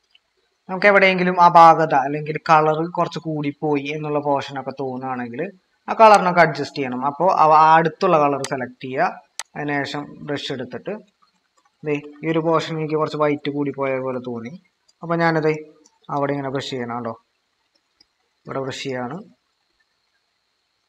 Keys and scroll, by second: 0.6 ctrl+-, 0.9 ctrl+-, 1.2 ctrl+-, 1.7 ctrl+-, 10.0 ctrl+=, 11.2-14.2 typing, 16.3-17.1 typing, 19.2-19.9 typing.